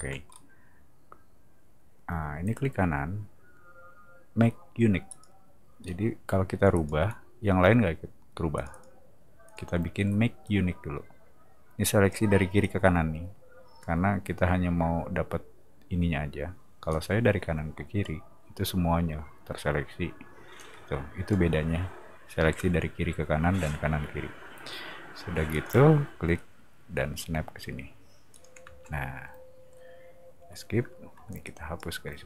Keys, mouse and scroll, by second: 0.3 middle click, 2.5 right click, 5.1 click, 5.8 scroll down 1, 6.7 click, 8.6 click, 8.7 click, 9.4 click, 10.4-12.1 drag, 12.6-13.8 drag, 16.9-18.0 drag, 20.6 click, 22.5 m, 25.5 click, 28.3 click, 28.6 space, 31.1 e, 31.4 click.